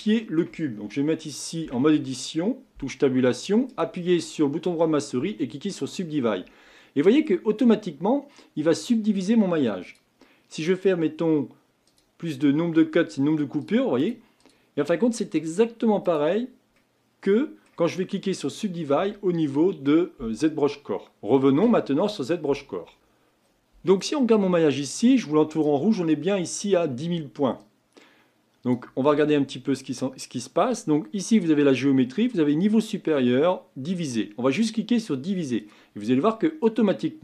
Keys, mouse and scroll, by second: 1.6 Tab, 3.7-6.8 right drag, 6.8-9.8 middle drag, 9.8-16.8 drag, 16.8-19.9 middle drag.